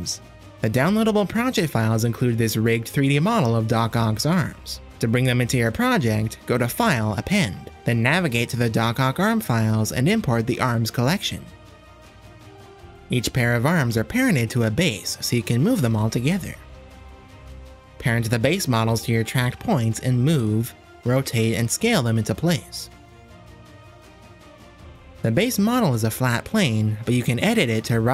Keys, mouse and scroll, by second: 0.0 r, 1.0 r, 2.3 click, 2.7 shift+click, 3.4 r, 5.6-8.3 drag, 13.9 click, 14.6 shift+click, 14.9-15.3 middle drag, 15.5 r, 16.3 s, 17.0 click, 18.0 ctrl+p, 19.0 click, 19.5 shift+click, 20.0 ctrl+p, 20.9 shift+click, 21.0 middle click, 21.1 click, 21.4-24.5 typing, 21.6 middle click, 22.0 drag, 23.0 middle drag, 23.1 click, 25.4 click, 26.8 h, 28.0 click.